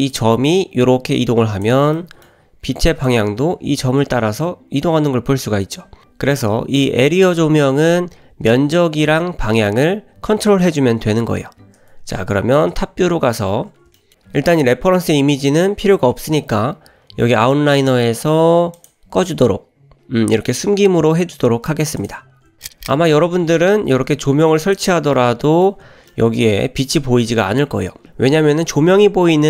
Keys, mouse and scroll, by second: 0.1-1.7 drag, 1.9 scroll down 1, 2.0-2.3 middle drag, 3.1-6.3 drag, 6.6 drag, 7.6 alt+g, 7.9 alt+r, 8.5 g, 9.5 middle click, 11.7-12.0 scroll down 1, 13.1 scroll down 1, 13.4-13.9 scroll up 1, 14.0 shift+middle drag, 18.8 click, 22.0 click, 22.4 scroll up 1, 22.6 middle click, 23.9 scroll up 2, 24.1 g, 25.2-26.6 middle drag, 27.4-28.2 middle drag, 28.6 click.